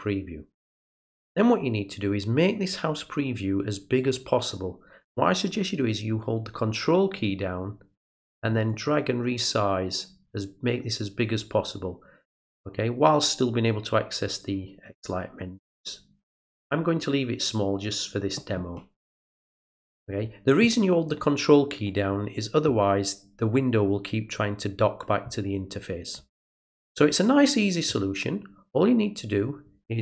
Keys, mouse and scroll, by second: 1.0 click, 8.7-19.1 ctrl+drag.